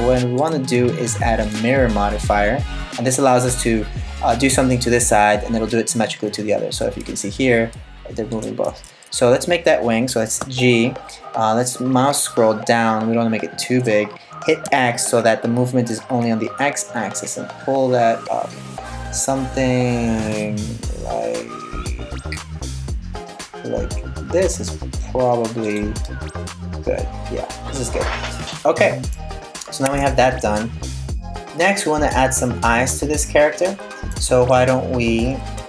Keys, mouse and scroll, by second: 0.0 click, 6.4 g, 8.3 super+z, 10.0 g, 25.7 middle click, 29.5 Tab, 31.4 middle click, 34.1-34.4 scroll up 2, 34.4-35.2 scroll down 1, 35.2 scroll down 2, 35.3 shift+a.